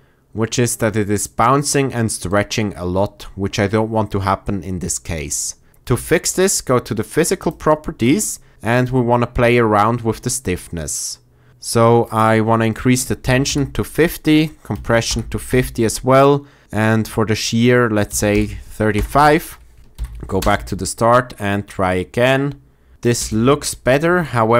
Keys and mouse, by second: 5.3 click, 5.7 space, 5.9 click, 7.4 click, 12.1-18.9 drag, 19.9 shift+Left, 20.3 space.